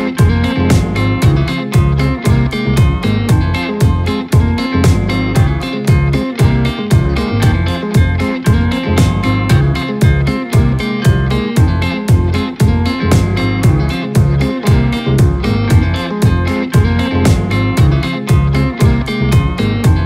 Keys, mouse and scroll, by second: 2.4 shift+d, 5.5 shift+d, 7.8-8.1 scroll up 4, 8.1-8.5 middle drag, 8.5 scroll down 2, 8.8-9.2 middle drag, 9.2 click, 9.4-10.4 scroll down 1, 10.4 click, 10.7 click, 11.1-11.4 scroll up 1, 11.4-15.1 middle drag, 15.1 click, 15.7 shift+click, 16.5 shift+click, 17.2 KP_1, 18.0-18.6 scroll up 3, 18.6-19.2 shift+middle drag, 19.2-20.0 shift+scroll down 6.